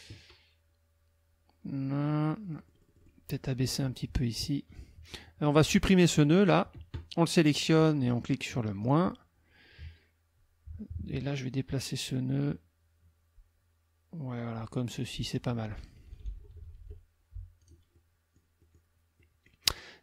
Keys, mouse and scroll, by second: 2.4 middle click, 3.6 click, 5.2 click, 8.8 click, 11.8-15.5 drag, 16.0 KP_Subtract, 17.6 click, 17.9 click, 18.6 click, 19.2 click.